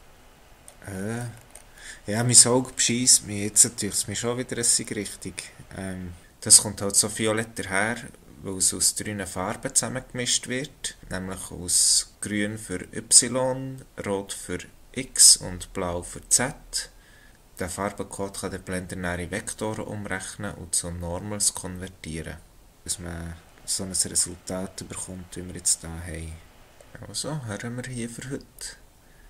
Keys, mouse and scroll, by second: 0.1 scroll up 1, 1.0-2.1 scroll down 4, 2.1-2.5 scroll down 2, 3.0 scroll up 2, 10.4-13.2 scroll down 1, 19.6-21.9 scroll up 3, 22.8 scroll up 1.